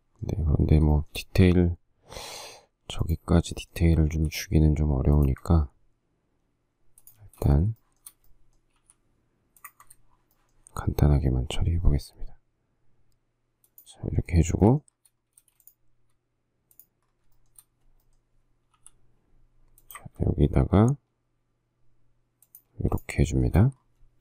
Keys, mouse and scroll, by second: 1.1 shift+middle click, 4.3 m, 5.5 ctrl+click, 7.4 space, 8.0 shift+middle click, 9.0 m, 9.9 ctrl+click, 10.3 shift+scroll, 10.5 shift+middle click, 13.9 shift+click, 14.2 shift+scroll, 14.5 shift+middle click, 15.6 space, 17.6 shift+middle click, 18.9 m, 22.9 space, 23.5 shift+middle click.